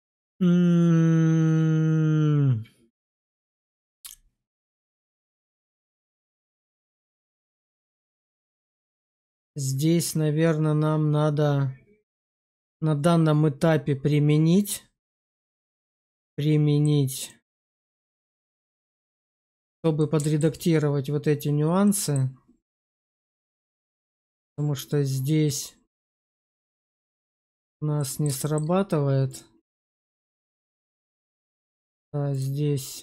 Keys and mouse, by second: 7.1 click, 8.3-8.7 middle drag, 9.0 shift+middle click, 9.3-15.1 middle drag, 15.4 shift+middle drag, 15.9 middle click, 17.1 click, 17.5 shift+middle drag, 18.0-19.1 middle drag, 19.3 shift+middle drag, 19.9-20.3 alt+middle drag, 21.7 middle drag, 23.0 q, 26.9 click, 27.9 middle drag, 28.3 shift+middle drag, 30.1 q, 32.2 click.